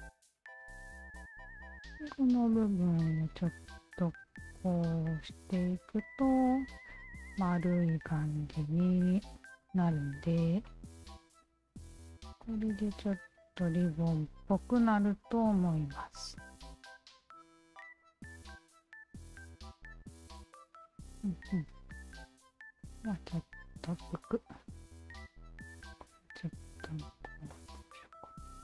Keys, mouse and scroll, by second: 0.2 s, 0.6 click, 1.5 shift+click, 2.4 w, 3.6 alt+click, 4.5 alt+click, 5.5 alt+click, 6.4 click, 7.5 alt+click, 8.3 alt+click, 9.9 alt+click, 10.7 alt+click, 11.3 alt+click, 12.0-13.6 alt+drag, 13.8 alt+click, 14.6 alt+click, 15.7 alt+click, 16.4 alt+click, 18.0-22.1 alt+drag, 22.8 alt+click, 23.4 alt+click, 24.8 alt+click, 25.7 shift+click, 26.8 shift+click, 28.4-28.6 drag.